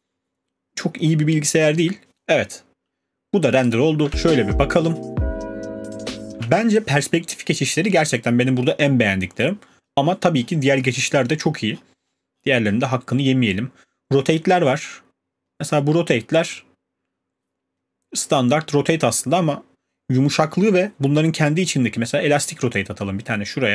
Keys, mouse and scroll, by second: 3.7 click, 4.1 click, 4.1 space, 6.3 middle click, 6.3 space, 9.2-13.3 scroll, 18.3 scroll.